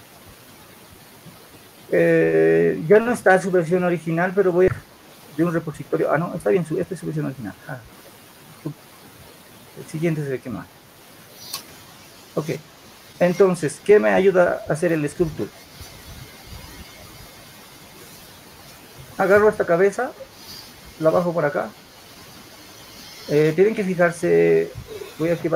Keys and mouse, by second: 12.4-14.5 drag, 15.1-16.3 drag.